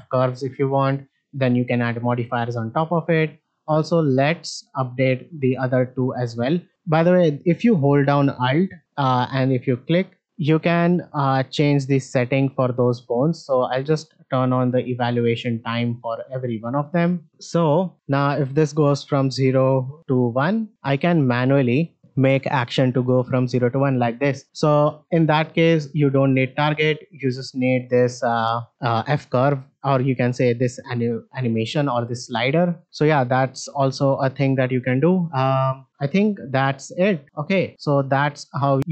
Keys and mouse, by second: 4.6-5.5 drag, 9.7 alt+click, 10.9 click, 11.5 click, 12.1 click, 13.6 click, 14.6 click, 15.9 click, 16.9 click, 19.0-20.1 drag, 20.5 shift+middle click, 20.8 click, 22.1-23.1 drag, 23.5 shift+middle drag, 24.4 shift+middle click, 26.7-29.8 drag, 31.3-32.3 drag, 34.7 click, 37.2 shift+middle drag, 38.3 shift+middle click, 38.8 middle click.